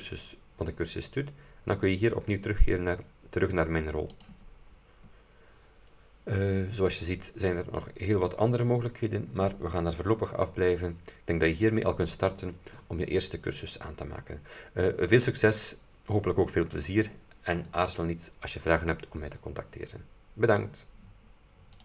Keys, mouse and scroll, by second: 4.3 click, 8.4-8.8 scroll down 2.